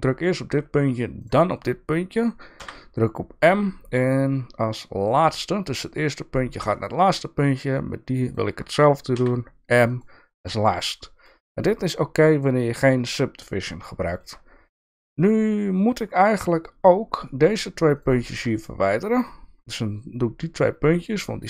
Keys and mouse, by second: 2.5 m, 6.7 shift+middle click, 7.3 click, 8.3 shift+click, 9.1 m, 10.4 click, 10.8 shift+middle click, 13.4 shift+middle click, 17.2 shift+middle click, 18.4 shift+click.